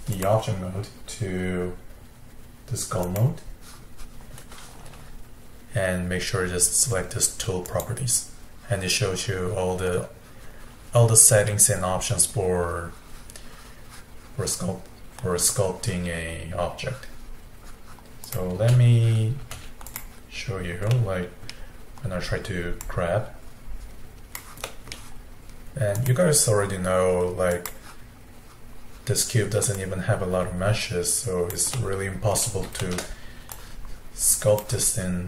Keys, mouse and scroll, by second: 0.1-3.2 drag, 7.6 click, 11.4-12.7 scroll down 8, 18.3 click, 18.6 g, 19.5 f, 21.0-22.8 middle drag, 22.8-24.7 drag, 24.7-26.0 middle drag, 26.0-29.0 drag, 29.8-31.8 drag, 31.8 middle click, 32.5-32.9 scroll down 1, 32.9 shift+middle click, 33.5-35.2 drag.